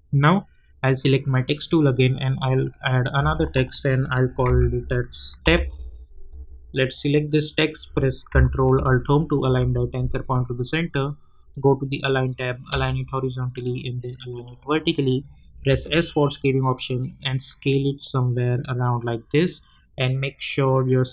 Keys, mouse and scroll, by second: 4.0-5.4 typing, 7.5 click, 9.4 ctrl+alt+Home, 11.5 click, 15.7 s, 16.4-21.1 drag.